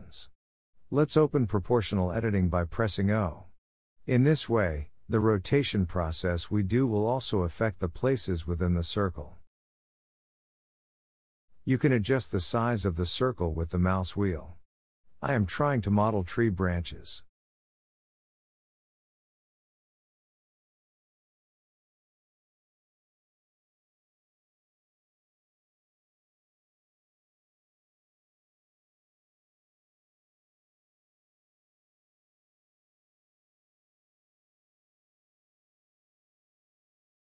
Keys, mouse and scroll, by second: 0.8 click, 1.3 shift+middle click, 1.8-2.9 scroll up 1, 2.9 o, 3.3 middle click, 3.7-4.6 scroll down 3, 4.6 r, 8.9 click, 9.3 r, 11.2 click, 11.4 r, 15.0-17.3 middle drag, 17.3-18.0 scroll up 2, 18.0 ctrl+r, 19.3 e, 20.7 ctrl+a, 22.4-22.7 scroll up 2, 22.7 click, 23.1 ctrl+a, 26.2 middle click, 26.7 g, 28.1 middle click, 28.8 click, 29.2 ctrl+a, 29.9 g, 30.5 click, 30.8 ctrl+a, 32.8 o, 33.1 click, 33.6 g, 34.4 e, 35.3 ctrl+a, 36.0 click, 36.3 e.